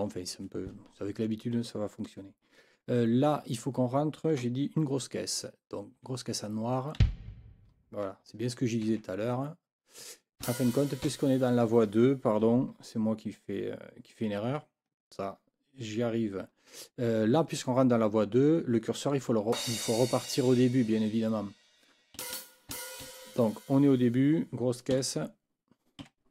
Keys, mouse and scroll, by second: 5.9 5, 7.0 b, 8.9 ctrl+z, 10.4 Left, 11.1 Left, 19.5 Left, 19.9 Right, 22.2 Right, 22.7 Left, 24.9 KP_4, 26.0 KP_5.